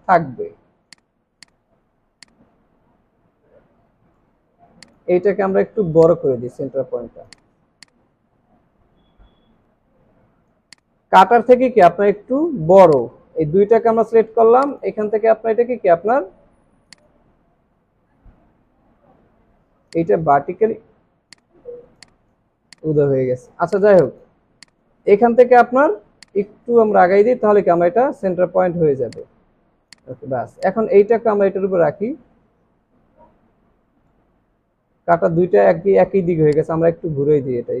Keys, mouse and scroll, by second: 6.0 alt+shift+click, 11.1 alt+scroll up 1, 18.1 ctrl+z, 21.9 alt+scroll down 1, 22.5 alt+scroll down 1, 22.7 space, 23.2 alt+scroll up 3, 23.8 space, 24.0 double click, 29.8 alt+scroll down 1, 29.9 space.